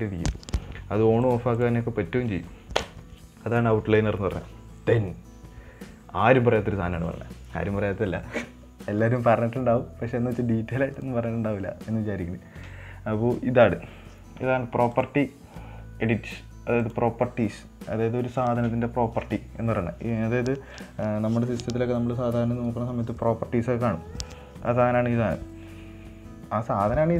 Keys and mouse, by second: 1.6 click, 2.0 click, 15.3 click.